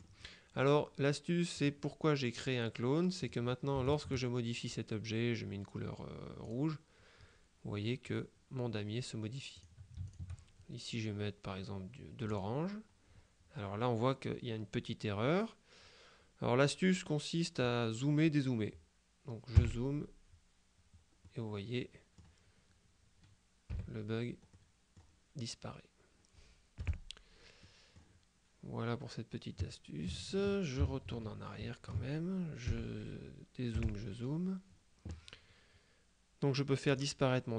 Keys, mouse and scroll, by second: 1.7 click, 3.3 click, 3.9 shift+click, 6.5 click, 9.6 click, 12.3 click, 19.6 KP_Add, 21.3 middle click, 21.5-22.7 drag, 23.8 KP_Subtract, 24.6 click, 26.9 KP_Add, 27.7 click, 31.1 z, 32.7 KP_Subtract, 33.8 KP_Add, 36.9 click.